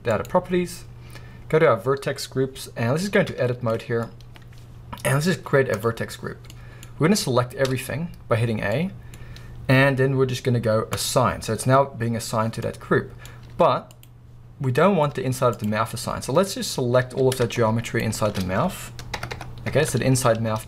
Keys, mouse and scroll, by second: 0.2-1.2 scroll down 1, 1.2-2.1 scroll down 1, 2.1-2.9 scroll down 1, 3.3 Tab, 3.7-5.8 middle drag, 4.1 scroll up 1, 5.8 click, 6.5-11.0 middle drag, 6.9 scroll down 1, 7.7 a, 9.3 scroll up 1, 11.0-12.6 drag, 12.6-15.4 middle drag, 14.0 z, 15.9-16.8 middle drag, 16.7 scroll up 2, 17.0 alt+a, 17.3-18.0 middle drag, 18.0-20.4 alt+shift+drag, 19.1 ctrl+KP_Add.